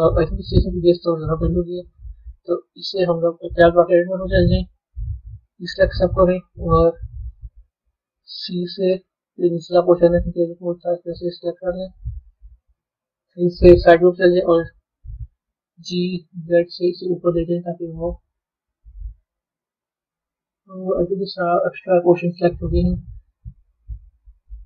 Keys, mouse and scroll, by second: 0.8-1.1 drag, 1.5-2.0 scroll down 2, 2.0-3.1 middle drag, 3.1-3.7 scroll down 1, 3.7 b, 4.1-5.4 middle drag, 11.7-13.3 middle drag, 13.3 KP_3, 21.0-22.5 middle drag, 24.4 middle click.